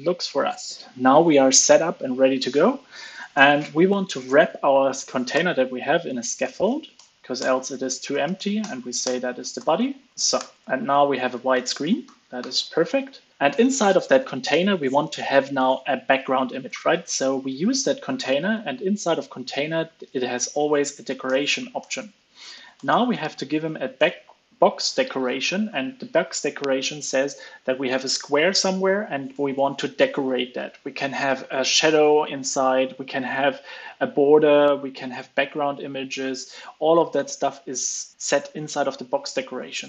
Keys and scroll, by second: 3.3 alt+Return, 10.0 super+s, 10.3 alt+super+l, 10.5 super+s, 11.2 super+Right, 12.3 alt+super+l, 12.5 super+s.